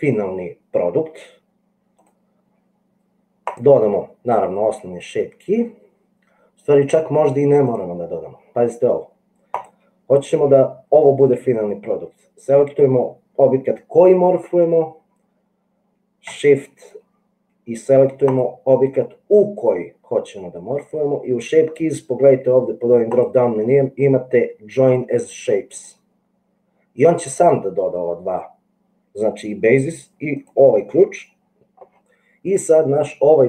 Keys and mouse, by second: 23.3-26.0 drag.